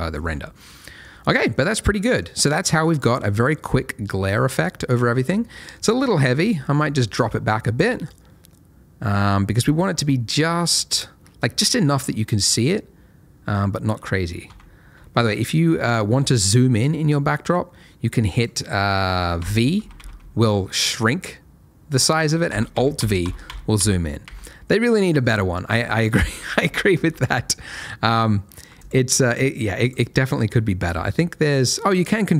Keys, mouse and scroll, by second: 0.0 middle click, 0.2-0.7 scroll up 1, 0.7 middle click, 2.2 scroll up 1, 2.5 middle click, 5.9 click, 9.2-12.3 scroll, 14.5 v, 16.6 alt+v, 18.3 click, 18.7-19.4 scroll down 1, 19.4 v, 19.8 v, 19.9 v, 22.7 alt+v, 22.9 alt+v, 23.2 alt+v, 23.4 alt+v, 23.7 alt+v, 24.2 alt+v, 25.6 alt+v, 26.3-27.0 typing, 27.2-27.8 scroll down 2, 27.8 alt+middle click, 28.8 click.